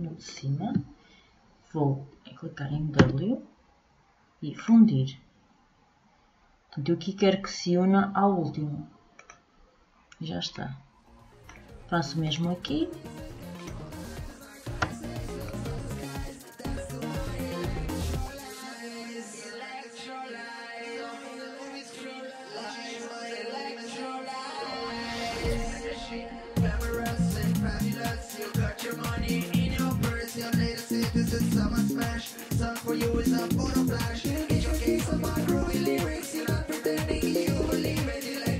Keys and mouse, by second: 2.5 w, 10.2 middle click, 11.8-14.3 drag, 14.3 w, 18.2 w, 20.0 middle click, 20.9 w, 23.7 w, 27.0 w, 29.4 w, 31.6 w, 34.2 w, 36.3 w, 38.4 w.